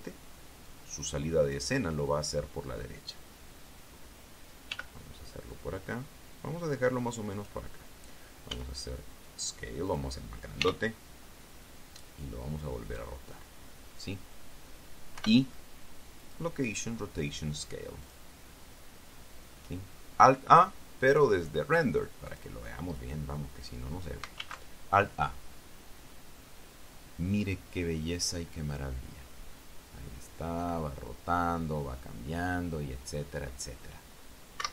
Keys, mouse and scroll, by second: 1.5 click, 5.5 g, 8.1 click, 9.3 s, 10.7 click, 11.4 r, 13.7 click, 16.0 i, 17.0 click, 18.9 click, 21.8 click, 23.1 click, 25.2 alt+a.